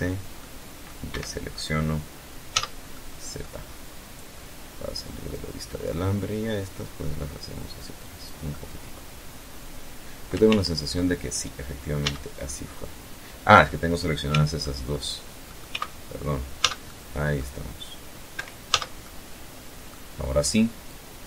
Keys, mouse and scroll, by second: 1.1 z, 1.5 click, 2.2 scroll down 2, 3.9-7.0 drag, 7.1-9.0 drag, 9.1 ctrl+z, 10.6 z, 11.2 scroll up 2, 12.8 c, 13.2 middle click, 14.0 middle click, 14.3 c, 15.2 z, 15.4-16.1 middle drag, 16.9 Escape, 17.2 z, 17.6-18.6 middle drag, 19.4-21.2 drag.